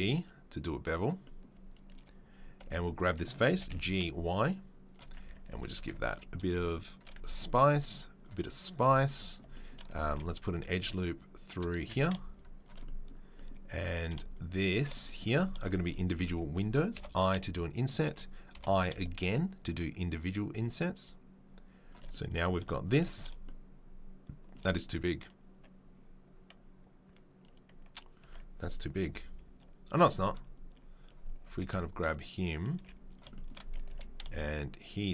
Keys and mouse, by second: 2.7 click, 2.8-11.8 middle drag, 3.5 g, 5.2 Tab, 5.3 Tab, 5.8 ctrl+r, 7.2 ctrl+r, 11.8 3, 11.8 right click, 12.0-31.0 shift+middle drag, 14.2 shift+click, 28.3 Tab, 29.0 KP_3, 31.0 click, 31.1-35.1 middle drag, 31.6 g, 32.7 z, 33.9 g.